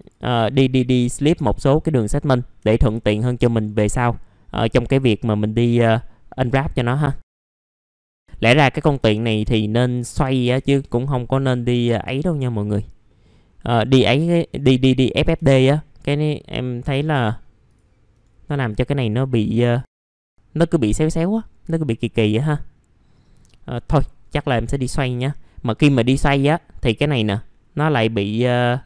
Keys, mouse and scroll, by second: 0.0 click, 0.6 scroll down 1, 0.9 alt+middle click, 1.6 scroll up 1, 2.7 alt+middle click, 3.6-4.0 scroll down 1, 5.6-6.4 scroll up 1, 6.4 click, 7.1 scroll up 1, 7.3 click, 7.5 scroll down 1, 7.6 middle click, 7.7 alt+middle click, 8.2 alt+middle click, 9.6-10.0 scroll down 1, 11.3-11.7 scroll up 1, 13.1 middle click, 13.5 scroll up 1, 14.5 ctrl+z, 15.2 ctrl+z, 16.9 right click, 17.7 click, 18.1 right click, 18.5 click, 22.2 middle click, 23.9 F11.